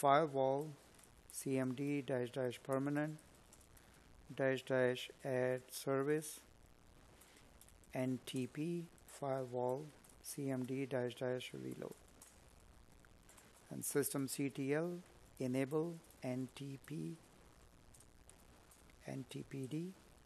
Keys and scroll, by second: 3.6 space, 5.1 space, 7.9 Up, 11.5 space, 13.5 space.